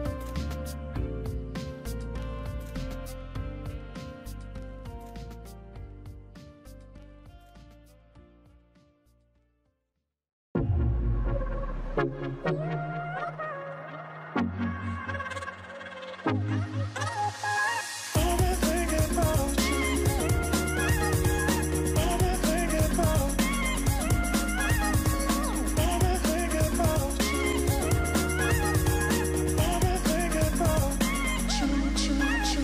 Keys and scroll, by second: 1.2 ctrl+v, 1.5 Return, 3.6 Return, 6.6 Return, 8.9 Return, 9.4 Return, 11.1 shift+Right, 11.4-12.0 typing, 13.5-14.8 typing, 15.9-16.7 typing.